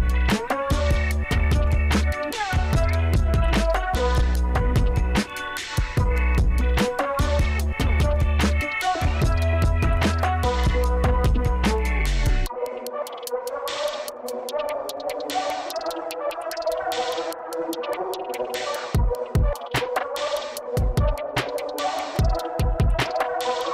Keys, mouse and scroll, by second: 4.4 super+click, 5.9 super+click, 9.9-12.5 super+drag, 12.9 super+click, 16.7 super+click, 18.0 super+click, 21.9 super+click, 23.4 super+click.